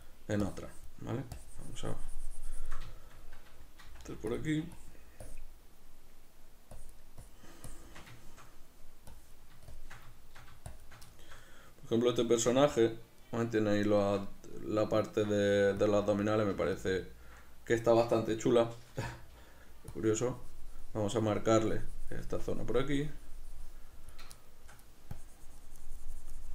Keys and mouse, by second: 3.0-4.5 shift+middle drag, 3.9 f, 4.8-8.2 drag, 8.2 shift+middle click, 9.2-10.2 drag, 10.2 shift+middle click, 10.7 shift+click, 11.2-16.0 shift+middle drag, 15.5 f, 16.0 click, 16.6 f, 16.9 click, 17.1-20.0 ctrl+middle drag, 19.1 m, 20.0-24.5 drag, 24.5 shift+middle click, 25.3-26.5 drag.